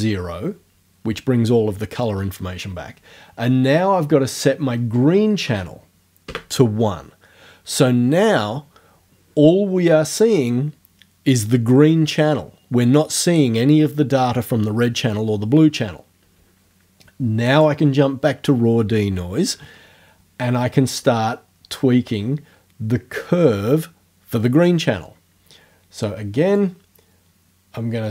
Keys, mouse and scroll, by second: 4.3 right click, 5.5 KP_1, 6.3 KP_Enter, 17.6 click, 26.6-28.1 drag.